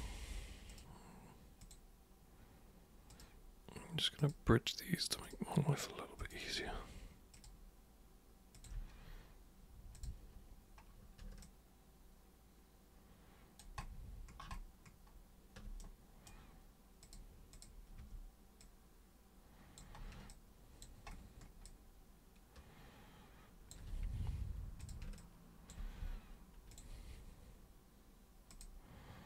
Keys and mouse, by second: 0.7 ctrl+shift+super+click, 1.6 ctrl+shift+super+click, 3.1 ctrl+shift+click, 4.2 ctrl+shift+click, 5.2 ctrl+shift+click, 6.2 ctrl+shift+click, 7.3 ctrl+shift+click, 8.5 ctrl+shift+click, 9.9 click, 11.4-13.6 alt+super+drag, 15.8 super+right click, 17.0 super+click, 17.6 super+click, 18.0 super+w, 18.6-19.8 super+drag, 20.1 super+space, 20.3-20.8 drag, 21.6-23.7 drag, 24.8 super+click, 25.1 alt+super+click, 26.7 ctrl+super+click, 28.5 ctrl+super+click.